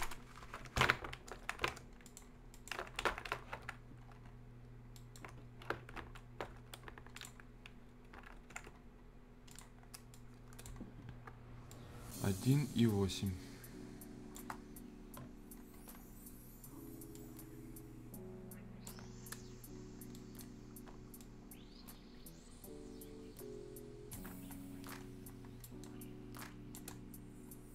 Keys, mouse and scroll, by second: 1.5 z, 2.0 click, 2.7 z, 4.0-4.5 scroll down 1, 4.8 scroll up 1, 4.9 right click, 5.9 ctrl+y, 6.5 y, 7.1 click, 7.4-8.0 scroll up 1, 8.5 ctrl+z, 8.7-9.4 scroll up 1, 9.5 click, 9.8 scroll down 1, 10.1 click, 10.8 scroll up 1, 11.7-14.5 drag, 14.5-15.1 shift+scroll up 2, 15.7 scroll down 1, 16.0-16.7 scroll up 1, 17.1-19.0 drag, 19.0 scroll up 1, 20.1 right click, 21.2-24.3 drag, 24.3-24.9 shift+scroll up 2, 25.6 right click, 26.4 click, 27.0-27.7 scroll up 1.